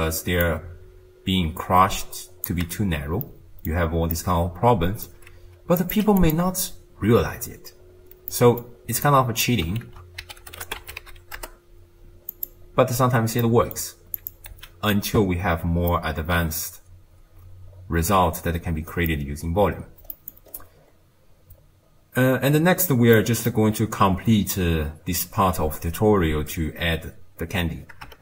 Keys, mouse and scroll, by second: 0.5-3.3 shift+drag, 3.3-3.8 middle drag, 3.8-4.2 scroll up 1, 4.2-5.8 middle drag, 5.8 click, 7.3-8.3 scroll down 2, 8.3-9.1 middle drag, 9.1 click, 9.8 ctrl+a, 13.4-14.2 middle drag, 14.2 click, 14.6 x, 15.9-19.0 middle drag, 20.1 middle click, 20.5-21.8 scroll down 7, 23.2-23.7 middle drag, 23.7-26.7 scroll down 2.